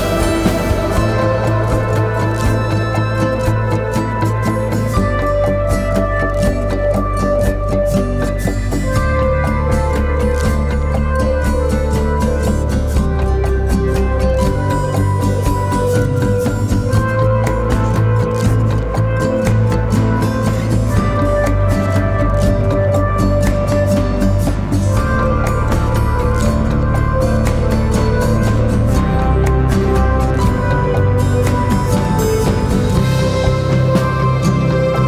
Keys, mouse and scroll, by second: 16.3 double click, 33.9 ctrl+click.